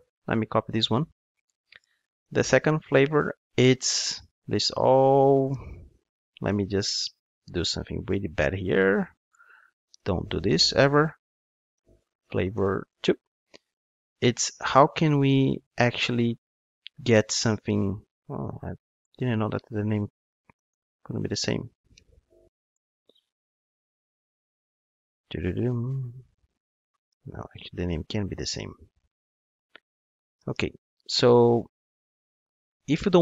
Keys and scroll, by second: 0.9 super+c, 2.3 super+v.